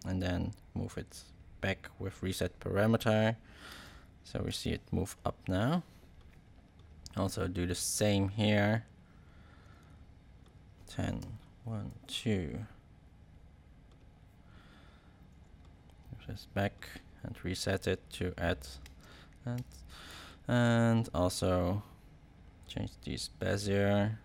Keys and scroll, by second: 3.6 space, 11.5 shift+Right, 18.8 space.